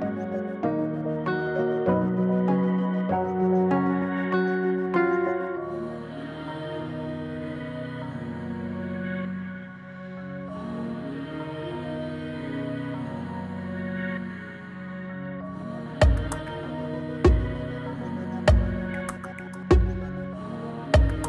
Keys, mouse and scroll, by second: 0.0-0.4 typing, 2.6-6.2 drag, 9.1-10.4 scroll down 1, 13.2 scroll down 1, 18.6 click.